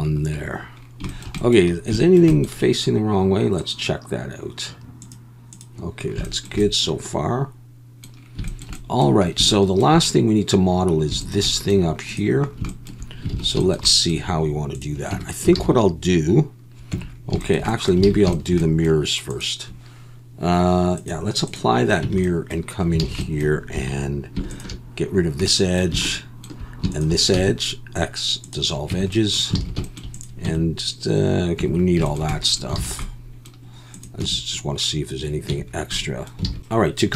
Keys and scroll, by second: 13.3 alt+a, 15.1 Tab, 15.6 alt+a, 16.9 Tab, 18.1 alt+a, 22.0 Tab, 23.0 alt+a, 23.7 2, 27.3 x, 28.9 Tab, 29.6 alt+a, 30.4 Tab, 31.6 Tab, 32.8 alt+a, 34.2 Tab, 35.5 Tab, 36.5 alt+a.